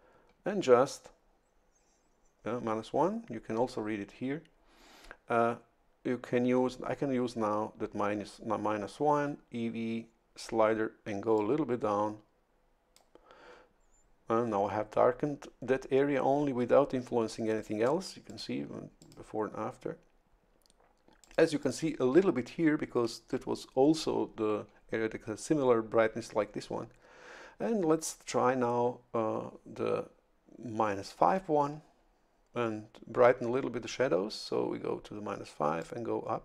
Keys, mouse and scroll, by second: 11.4-13.3 drag, 18.3 click, 19.0 click, 21.2 click, 21.6 click, 35.8-36.4 drag.